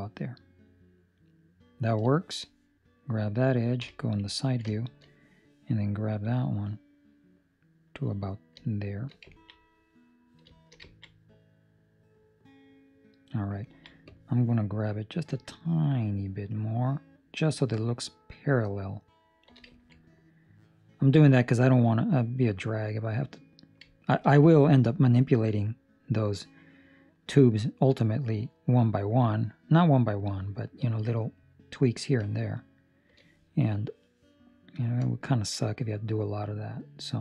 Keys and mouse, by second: 2.1 shift+middle click, 2.8 right click, 3.7 KP_3, 4.4 ctrl+middle click, 4.6 shift+middle click, 6.2 click, 9.3 ctrl+middle click, 9.5 middle click, 10.4 shift+middle click, 10.8 ctrl+middle click, 11.1 middle click, 13.6 ctrl+middle click, 14.0 click, 14.8 click, 19.7 ctrl+middle click, 19.9 middle click, 21.5 middle click, 23.8 ctrl+middle click, 24.3 shift+middle click, 25.3 middle click, 31.3 click, 33.6 right click, 34.7 click.